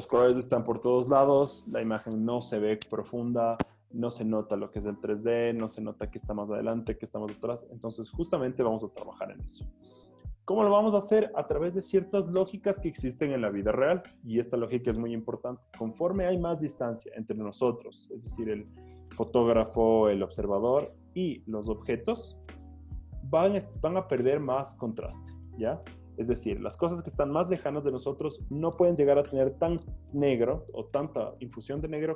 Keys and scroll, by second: 9.5 Escape.